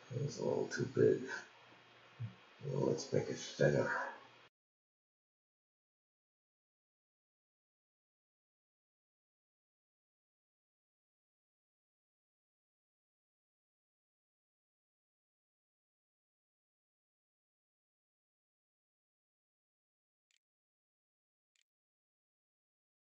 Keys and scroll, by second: 17.5-23.0 typing.